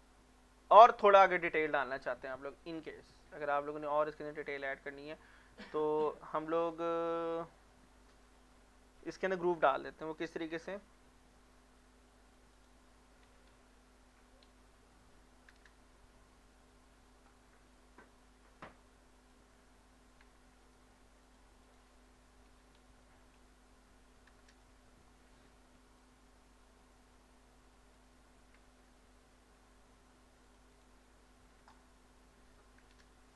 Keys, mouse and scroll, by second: 0.6 middle click, 4.0 middle click, 4.2 scroll down 1, 4.5 middle click, 10.9 ctrl+r, 12.3 click, 12.5 right click, 13.0-14.5 typing, 17.3-20.8 drag, 20.8 ctrl+r, 21.3 click, 21.6 right click, 22.3-23.4 typing, 25.3-26.0 scroll up 1, 26.0-28.9 drag, 28.9 ctrl+r, 30.5 click, 30.7 right click, 31.3-32.2 typing.